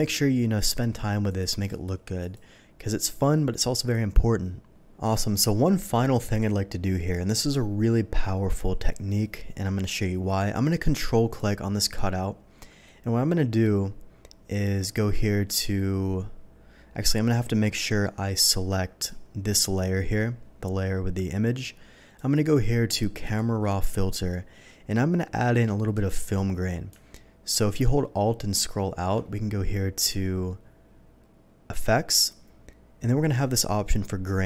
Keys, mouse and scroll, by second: 0.2 typing, 1.3 click, 1.7 click, 2.2 click, 7.1 click, 11.3 ctrl+click, 19.0 click, 22.1 click, 23.2 click, 28.0 alt+middle click, 28.0-28.3 scroll up 1, 28.3-29.3 scroll down 1, 29.3 scroll down 1, 31.7 alt+click, 34.2-34.4 drag.